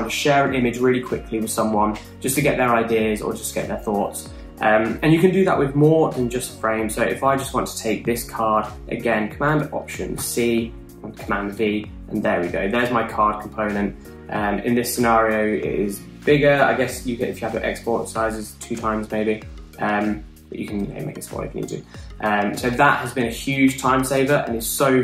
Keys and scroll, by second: 11.2 shift+super+c, 12.3 super+v.